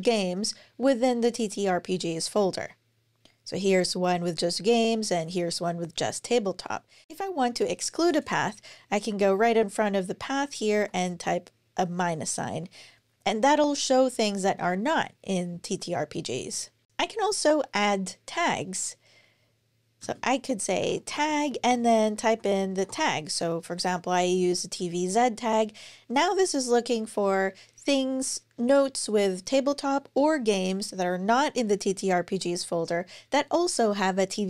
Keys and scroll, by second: 19.8-22.9 typing.